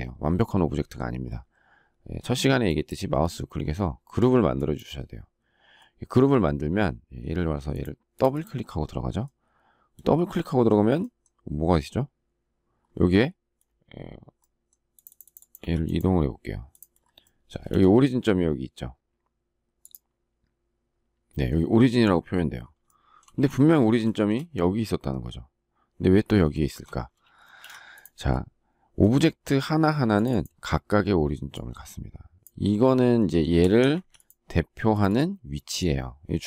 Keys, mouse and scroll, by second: 17.6 space, 26.5 shift+middle click, 27.3 space, 27.5 Escape, 33.9 Escape.